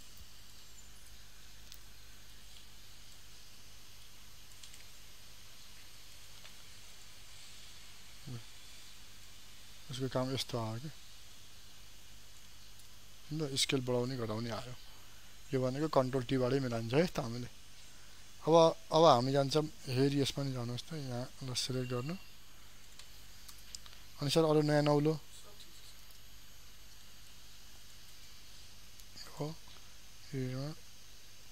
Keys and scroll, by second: 1.9 ctrl+j.